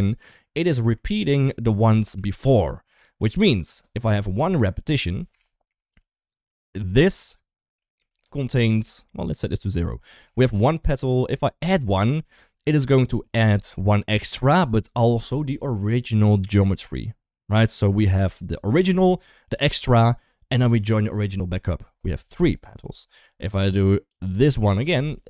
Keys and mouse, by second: 0.8 middle drag, 2.0 shift+middle drag, 4.8 click, 6.3 middle click, 7.6 shift+middle drag, 10.1 shift+middle click, 24.0 click, 24.4 middle click, 25.0 shift+middle drag.